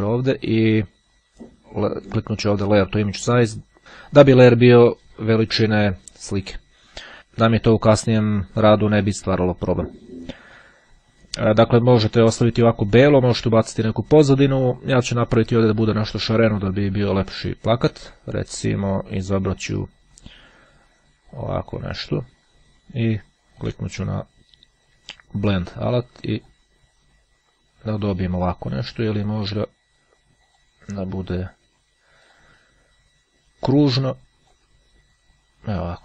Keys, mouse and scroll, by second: 3.1 click, 17.2 click, 21.4 click, 23.7 click, 25.9-27.1 drag, 30.6 click, 32.3 click, 33.9-35.1 drag.